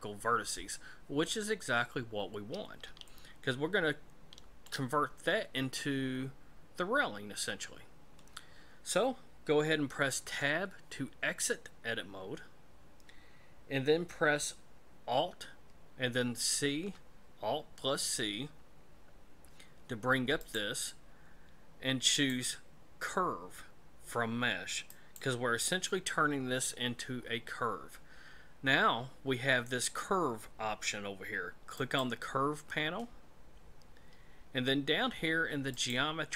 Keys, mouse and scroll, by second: 3.0 shift+middle click, 10.2 Tab, 16.2 alt+c, 20.4 click, 22.1 click, 31.7 click, 34.1-34.8 scroll down 4, 35.7 click.